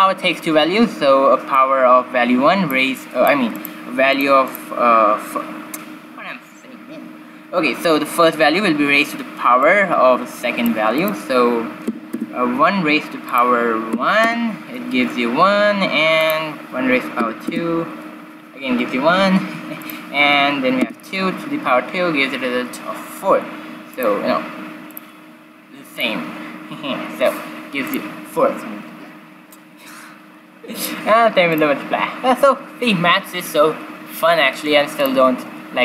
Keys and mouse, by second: 1.5-5.2 drag, 9.6-12.6 drag, 13.2-15.1 drag, 16.2-17.9 drag, 19.7-21.6 drag, 23.9-25.7 drag, 25.8-27.7 drag, 30.7-32.6 drag, 34.9-35.8 drag.